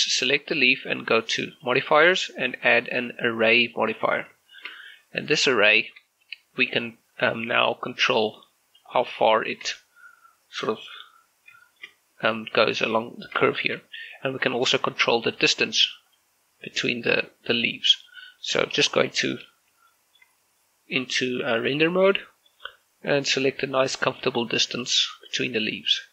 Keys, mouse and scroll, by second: 1.6 click, 4.4 click, 4.5 shift+scroll up 1, 5.8 shift+middle click, 7.6-9.4 drag, 9.4 shift+middle click, 10.8 click, 11.7 shift+middle click, 13.6 shift+middle click, 13.8-15.4 scroll up 1, 15.4 click, 19.2 shift+z, 20.0 shift+middle click, 21.6 shift+click, 22.2-24.2 middle drag, 24.2 click.